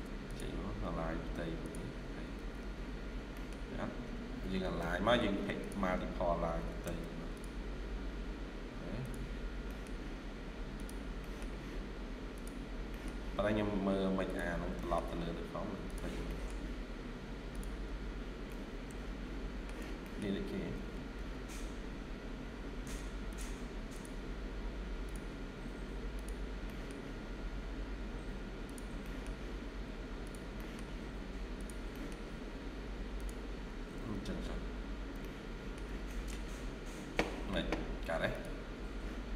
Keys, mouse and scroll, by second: 0.0 typing, 0.5 scroll up 1, 1.4 typing, 2.2 Escape, 2.5 Escape, 2.6-3.1 scroll down 3, 3.2 middle click, 3.7-4.2 scroll up 1, 4.3-5.2 typing, 6.7 Tab, 6.9 typing, 7.5 scroll up 1, 8.5 scroll up 1, 9.6 middle click, 11.1 middle click, 12.5-13.1 scroll down 2, 12.8 middle click, 13.3-13.9 scroll up 1, 14.4 scroll down 1, 14.7 middle click, 15.1 scroll up 1, 16.1 middle click, 17.7 scroll down 1, 18.4 middle click, 19.0-19.8 shift+scroll down 1, 19.9 middle click, 20.6-21.0 typing, 21.3 scroll up 1, 22.2-23.0 typing, 22.7 Tab, 25.4 scroll up 1, 25.8 typing, 26.5 middle click, 28.9 middle click, 30.4 middle click, 31.8 middle click, 33.8 Escape, 34.0 Escape, 34.2-34.6 scroll down 3, 35.1 shift+middle click, 35.7 shift+scroll down 1, 35.9 middle click.